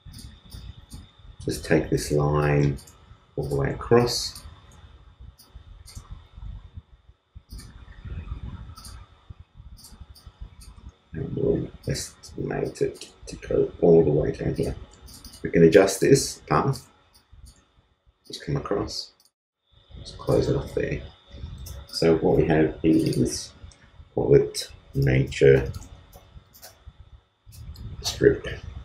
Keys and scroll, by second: 6.2 super+space, 6.4 super+z, 16.9 shift+space.